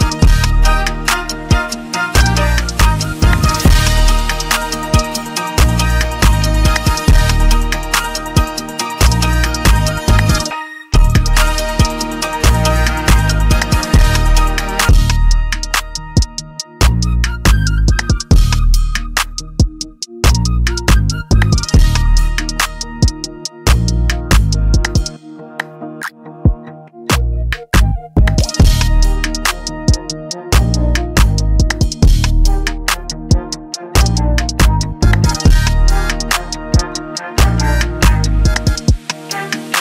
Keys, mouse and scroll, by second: 16.7 scroll, 17.4-20.2 scroll, 20.2-22.8 scroll, 22.9-23.5 scroll, 36.4 click.